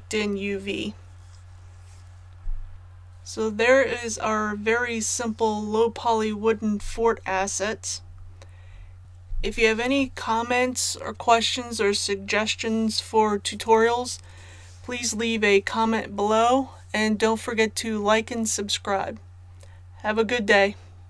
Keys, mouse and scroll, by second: 2.7 click, 7.9-9.8 scroll down 1.